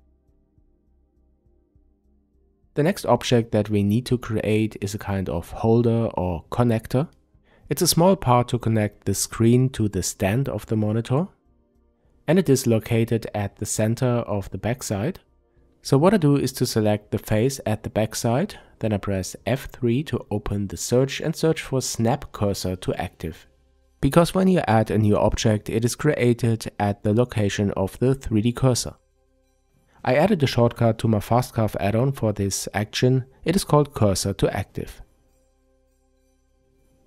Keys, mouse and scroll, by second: 0.0-0.4 scroll down 1, 0.4-11.1 middle drag, 7.8 Tab, 9.1-11.1 scroll up 2, 11.1 click, 11.6 click, 11.9 click, 12.5 click, 12.7 click, 13.9-33.2 shift+middle drag, 18.9 F3, 30.7 n, 33.2 click, 34.9 n, 36.2 Tab.